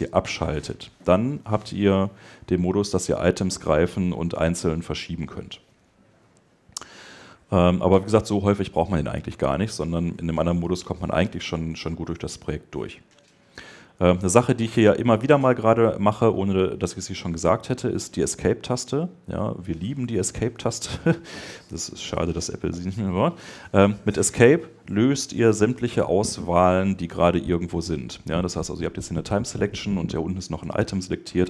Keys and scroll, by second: 31.2 Escape.